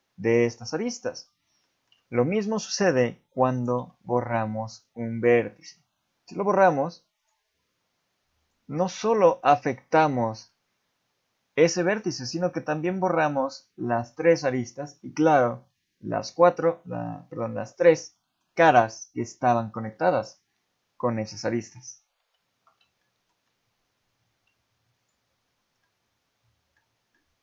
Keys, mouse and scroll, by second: 0.0 ctrl+z, 1.6 shift+middle click, 3.8 x, 9.2 middle click, 10.1 shift+middle click, 17.1 middle click, 18.1 shift+middle click, 19.9 middle click, 22.2 ctrl+z, 23.0 shift+middle click, 25.0 shift+click, 25.8 middle click, 27.1 middle click.